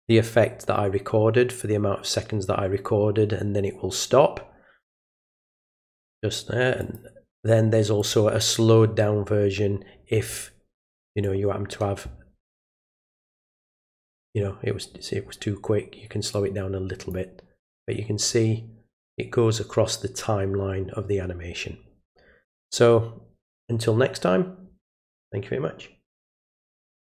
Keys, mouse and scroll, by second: 6.8 click, 8.0 click, 11.2-12.6 drag, 16.3 click, 27.1 click.